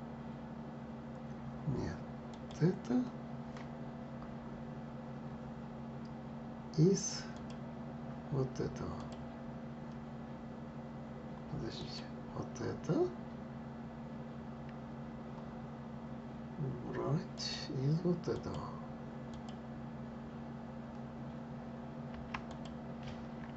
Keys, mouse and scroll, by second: 2.0 click, 7.0 click, 8.6 click, 11.5 click, 17.1 click, 19.0 click, 22.2 click.